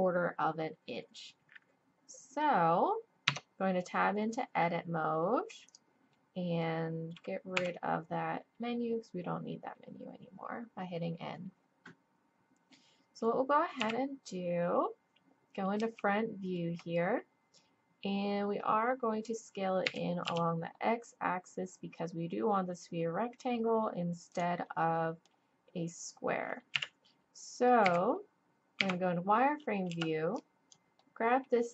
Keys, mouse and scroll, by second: 3.3 Tab, 5.7 click, 6.1 middle click, 7.5 n, 13.8 KP_1, 19.8 s, 24.7-26.0 drag, 26.7 middle click, 26.7 KP_1, 27.8 a, 28.8 z, 29.9 b.